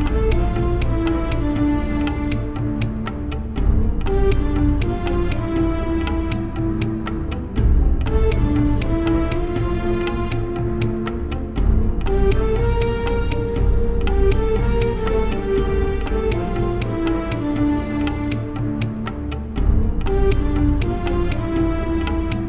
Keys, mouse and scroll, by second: 2.4 shift+e, 3.8 Tab, 4.3 middle click, 4.8 Tab, 6.1 ctrl+b, 7.9 click, 8.5 Return, 9.1 BackSpace, 9.3 BackSpace, 10.3 Tab, 13.8 Tab, 14.6-16.5 right drag, 16.5 middle click, 16.6 right click, 16.7 middle click, 17.4 right click, 17.8 middle click, 17.8 right click, 19.1 middle click, 20.1-22.4 middle drag, 20.1-21.7 right drag, 21.5 shift+e.